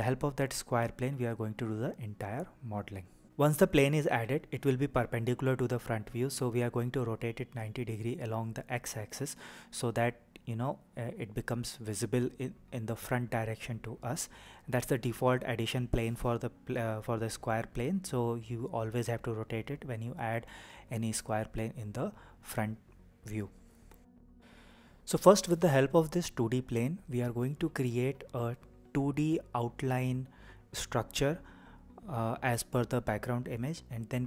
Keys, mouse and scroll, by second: 3.3 Escape, 5.2 r, 12.2 x, 17.2 KP_0, 21.7 Return, 23.1-24.4 scroll up 5, 24.5-25.5 shift+middle drag, 33.9 click.